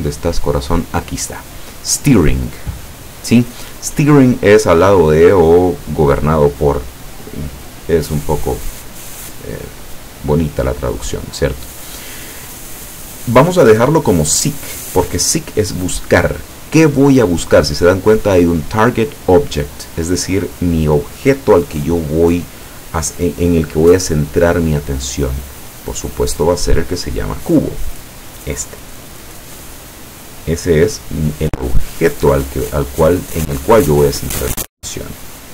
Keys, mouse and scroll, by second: 2.8 click, 5.2-6.4 drag, 13.9 click, 25.7 click, 27.4 click.